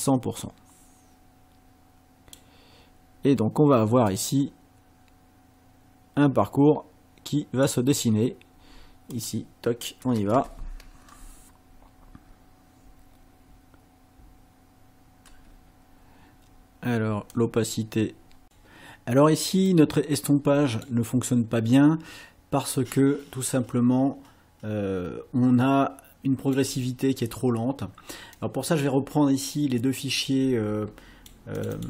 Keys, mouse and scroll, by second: 4.1-7.9 drag, 9.1 click, 10.3 space, 15.3 space, 17.3-18.6 drag, 19.8-21.0 drag, 22.8-26.7 drag, 28.4-31.4 drag, 31.6 click.